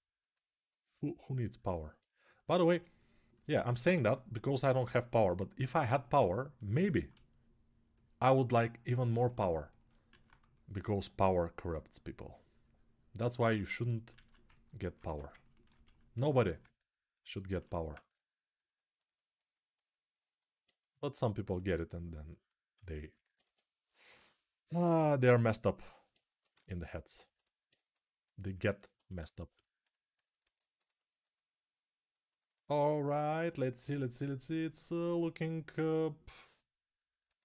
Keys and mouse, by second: 9.7-14.2 alt+right drag, 9.9 alt+q, 13.9 alt+q, 14.2 ctrl+alt+click, 14.3 ctrl+alt+right click, 14.5-30.0 alt+drag, 14.8 1, 30.0 ctrl+alt+right click, 30.3 alt+shift+click, 30.6-32.2 alt+shift+right drag.